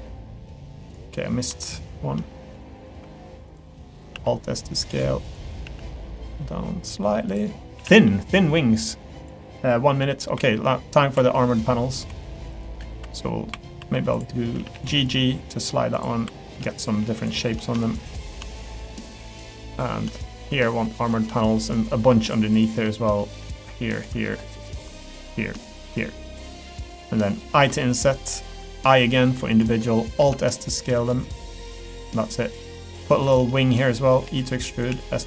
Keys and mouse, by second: 1.0 middle click, 2.2 middle click, 3.7 middle click, 4.1 alt+s, 7.7 a, 7.9 g, 10.0 middle click, 10.3 3, 11.1 2, 12.9 3, 13.5 2, 13.8 1, 14.6 g, 16.2 3, 16.7 shift+click, 17.2 shift+click, 18.0 shift+click, 19.0 middle click, 20.6 click, 22.5 shift+click, 23.2 middle click, 23.6 shift+click, 24.3 middle click, 25.8 shift+click, 26.1-27.1 middle drag, 29.7 middle click, 30.2 alt+s, 32.1 middle click, 32.5 3, 32.9 click, 33.5 middle click, 34.2 e, 34.9 s.